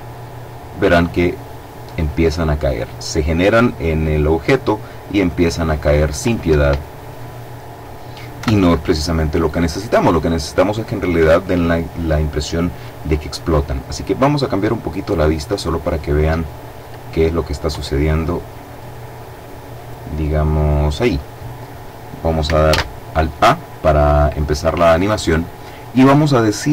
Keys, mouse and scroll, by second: 6.3 Escape, 8.1 KP_7, 13.3-14.9 middle drag, 16.2 middle click, 17.8-19.0 middle drag, 19.9 middle click, 22.4 alt+a.